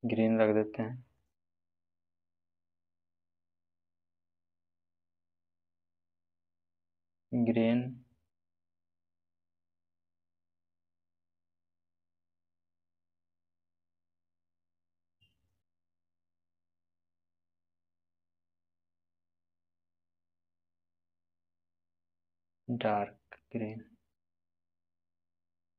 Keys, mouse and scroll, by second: 12.4 right click, 13.3-21.2 drag.